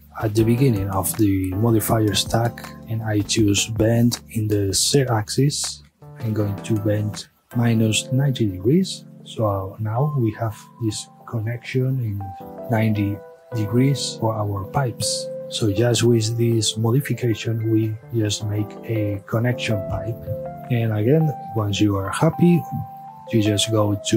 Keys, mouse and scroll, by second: 0.0-3.1 drag, 4.1-7.9 drag, 7.9 KP_Enter, 8.7-11.2 middle drag, 12.4-14.1 middle drag, 14.6-15.9 middle drag, 15.9 click, 17.0-17.5 middle drag, 17.5 space, 20.5-21.5 middle drag, 21.5 click, 23.6 click.